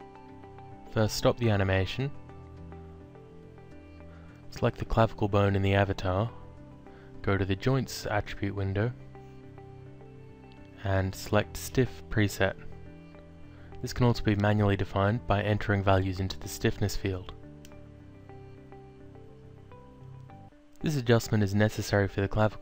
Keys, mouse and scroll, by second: 2.3 alt+click, 3.5 click, 4.8 click, 5.1 alt+click, 7.3 click, 10.3 click, 12.1 click, 13.4 click, 15.2 click, 17.7 0, 18.0 ., 18.5 9, 19.6 5, 19.9 Return, 21.5 click.